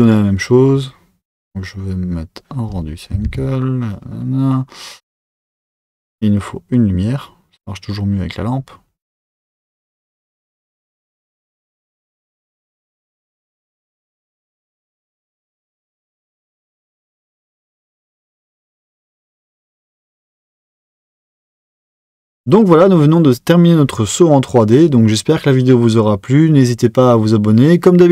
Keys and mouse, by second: 0.0 click, 2.6 z.